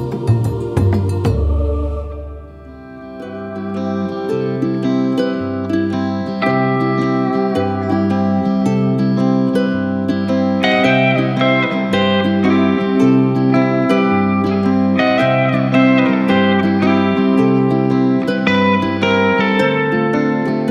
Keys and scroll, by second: 6.7 ctrl+s.